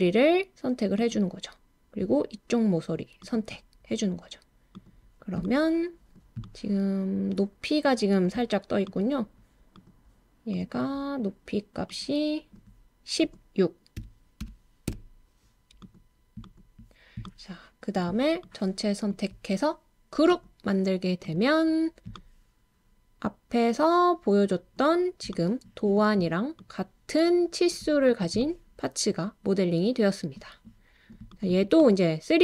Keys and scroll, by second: 13.7-14.9 typing, 19.4 typing, 30.3-31.2 typing.